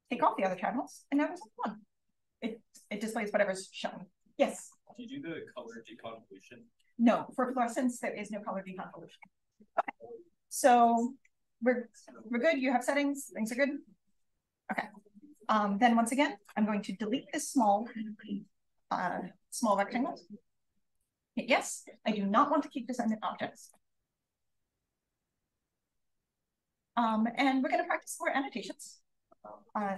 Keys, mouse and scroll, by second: 9.5-11.2 scroll down 1, 11.2-12.6 scroll down 1, 12.6-13.6 scroll down 1, 13.6-14.6 scroll down 1, 14.6-15.0 scroll down 1, 15.0-17.1 scroll up 2, 16.3 click, 17.1-17.5 scroll up 1, 17.4 click, 19.6-21.0 drag, 23.6 click, 26.0 click, 26.2-27.0 scroll down 1, 27.0 drag, 28.5 click.